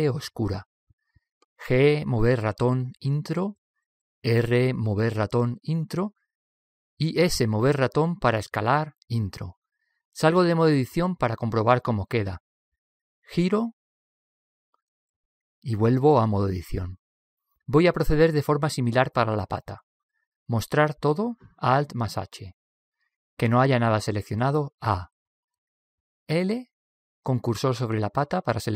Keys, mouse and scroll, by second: 2.0 g, 6.4 r, 9.7 s, 12.7 Tab, 13.2-15.1 middle drag, 17.7 Tab, 18.6 middle click, 20.1 middle click, 21.0 alt+h, 22.6 alt+h, 25.1 a, 26.5 a, 27.2 l.